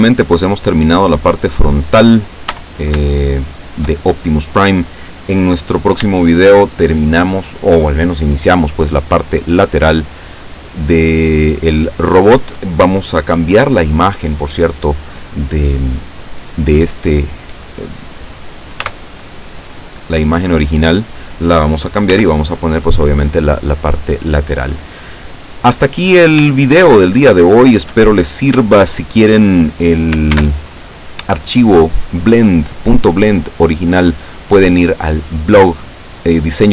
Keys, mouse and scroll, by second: 0.0 shift+scroll up 2, 0.7 scroll down 2, 2.6 Tab, 3.2-4.0 shift+middle drag, 4.2-4.6 shift+scroll up 3, 6.2-7.9 shift+middle drag, 18.9 z, 22.1 z, 25.9-26.2 scroll down 2, 26.6-28.1 shift+middle drag, 28.2 shift+scroll down 3, 28.7-29.4 shift+middle drag, 30.3 ctrl+s, 30.7 ctrl+click.